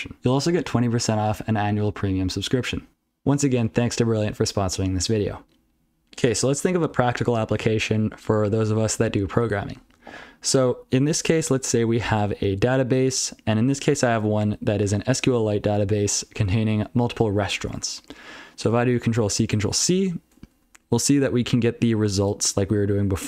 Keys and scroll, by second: 12.2 ctrl+n, 12.5 ctrl+n, 14.0-14.7 ctrl+f, 15.3 ctrl+alt+f, 15.5 ctrl+alt+f, 15.7 ctrl+alt+f, 15.8 ctrl+alt+f, 16.0 ctrl+alt+f, 16.2 ctrl+alt+f, 16.4 ctrl+alt+f, 17.8 ctrl+n, 18.0 ctrl+n, 19.5 ctrl+n, 19.9 ctrl+c, 20.8 ctrl+n, 21.0 ctrl+n, 21.2 ctrl+n, 21.4 ctrl+n, 22.1 ctrl+n.